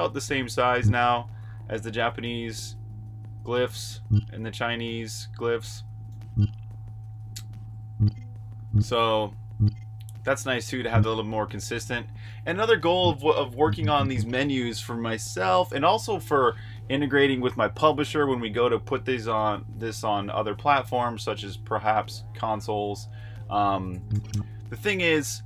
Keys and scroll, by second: 0.0-0.5 typing, 3.7 h, 7.7-10.6 typing, 13.1-13.9 typing, 23.8 typing.